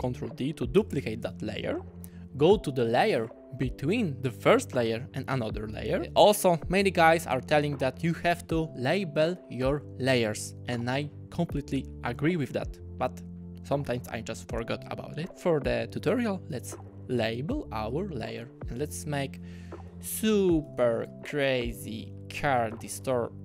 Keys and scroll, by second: 0.8 super+d, 18.4 Return, 19.9-21.4 typing.